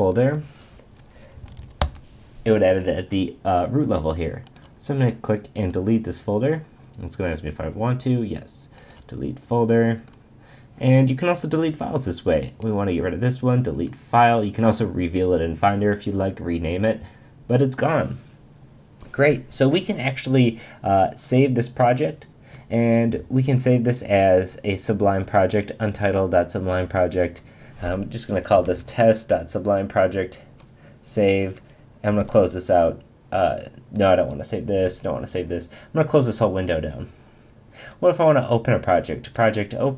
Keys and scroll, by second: 1.8 Return, 32.2 super+w, 34.7 super+w.